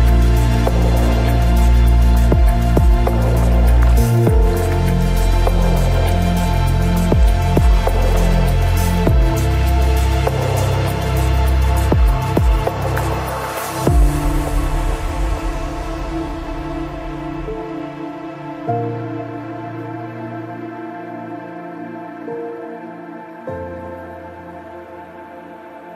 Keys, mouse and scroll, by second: 0.5 ctrl+r, 3.4 ctrl+r, 4.5-6.0 right drag, 4.8 g, 6.0 g, 7.2 g, 9.4 g, 12.3 g, 13.8 ctrl+r, 15.1-17.3 right drag, 16.7 g, 18.0 g, 19.1 ctrl+r, 19.8 click, 20.0-25.0 right drag, 20.2 g, 21.2 g, 22.5 g, 23.5 g.